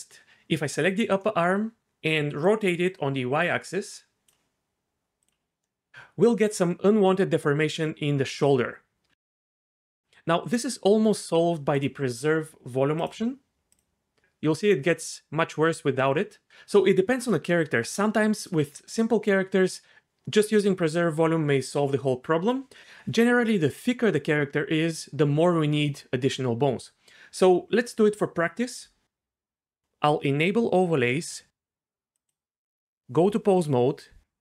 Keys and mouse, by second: 1.2-2.5 drag, 5.2 click, 5.6 middle drag, 9.2 Tab, 11.7 click, 13.7 click, 31.0 click, 32.1 click, 33.1 click, 33.8 Tab.